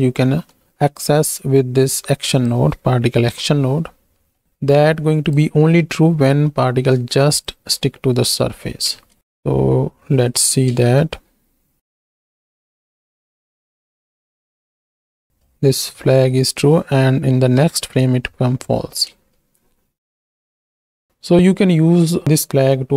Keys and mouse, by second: 0.2 shift+d, 2.3 click, 3.5 alt+p, 4.2 middle click, 4.7 click, 5.7 middle click, 6.4 middle click, 7.3 ctrl+shift+click, 8.9 ctrl+space, 9.2 shift+Left, 10.7 space, 13.4 Left, 13.5 Left, 13.6 Left, 13.8 Left, 14.1 Right, 15.1 shift+click, 17.6 Right, 19.1 space, 20.8 space.